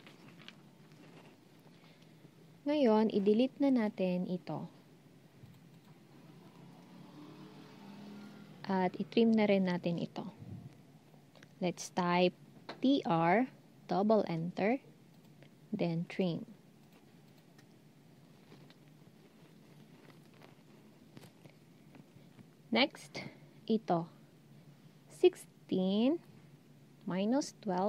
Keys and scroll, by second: 12.5-13.3 typing.